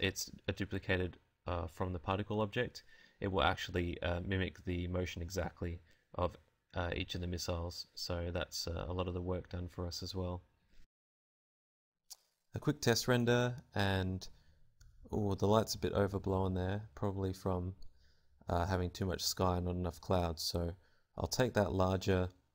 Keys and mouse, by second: 15.3 Escape, 15.8 alt+z, 16.6 KP_0, 17.5 Tab, 17.6 a, 17.8 a, 19.8 right click, 20.2 g, 21.2 click, 21.3 right click, 21.5 g.